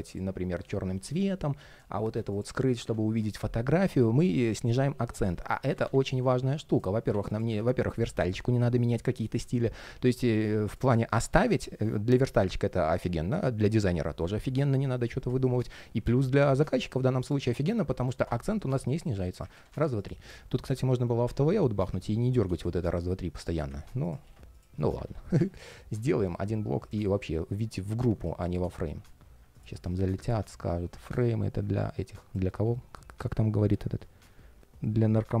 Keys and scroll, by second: 5.4 super+z, 24.0 super+s, 24.7 super+s.